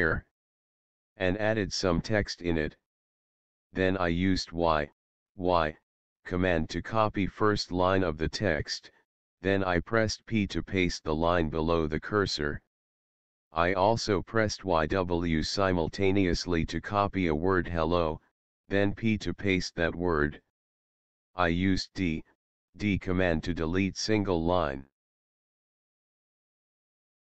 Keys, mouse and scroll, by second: 0.3 Return, 4.7 y, 4.9 y, 6.2 Down, 6.7 Down, 10.1 p, 12.2 Up, 12.5 Up, 14.7 y, 15.0 w, 16.8 Down, 17.4 Down, 18.0 Right, 18.7 Right, 19.2 Down, 19.2 Right, 22.3 d, 22.7 d, 24.1-25.3 typing.